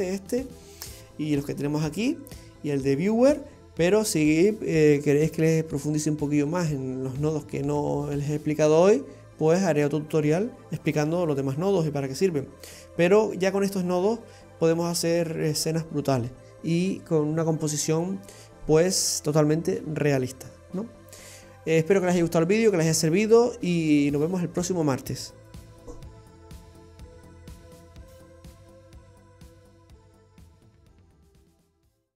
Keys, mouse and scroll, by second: 0.8-1.3 scroll up 4.